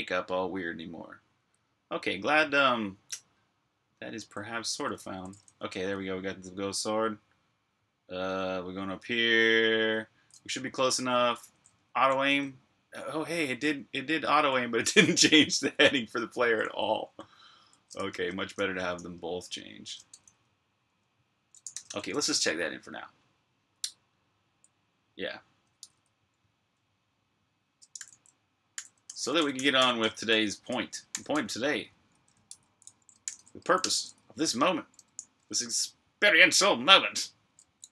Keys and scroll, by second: 0.0-0.3 typing, 1.9-2.7 typing, 4.2-11.1 typing, 15.9-18.0 typing, 18.2 super+q, 19.7-22.1 typing, 25.4-33.7 typing.